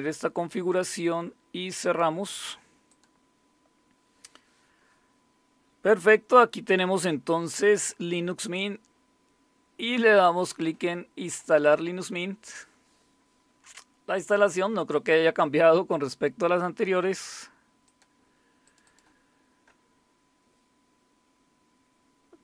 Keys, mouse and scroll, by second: 1.8 click, 2.9 click, 7.6 click, 10.4 click, 11.4 click, 11.6 click, 17.8 click, 18.7 click.